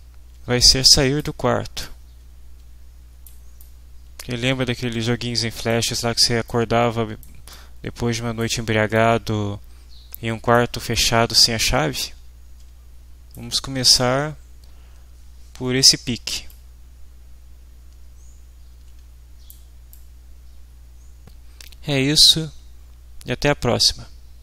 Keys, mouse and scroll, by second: 0.8 click, 1.0 right click, 1.8-3.4 right drag, 2.6 w, 3.6-5.7 right drag, 4.0 w, 5.7 click, 6.5 click, 7.5-8.6 drag, 8.9-10.7 drag, 9.8 w, 10.9-13.5 right drag, 11.4 w, 14.0-16.0 right drag, 14.9 w, 16.5-19.7 right drag, 18.0 w, 19.9 right click, 20.6 click.